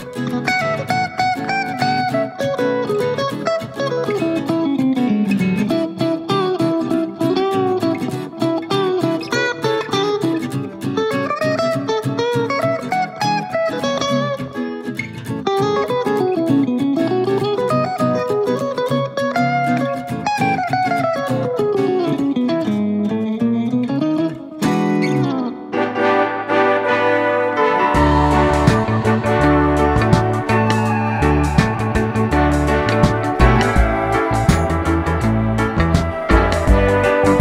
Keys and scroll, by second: 9.2 d.